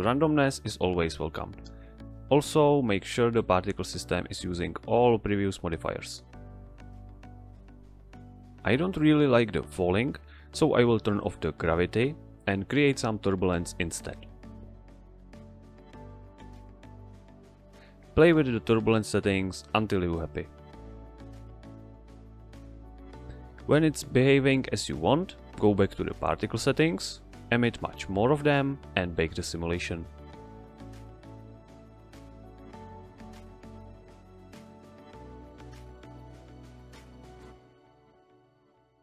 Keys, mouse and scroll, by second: 7.6 click, 10.2 click, 13.3 shift+a, 15.0 click, 17.0 click, 18.3 click, 19.5 Tab, 20.5 Tab, 21.3 Return, 27.8 click, 28.9 click, 31.6 click, 33.8 click, 35.6 Return, 36.7 ctrl+click, 37.3 click, 38.0-38.5 typing, 38.7 Return.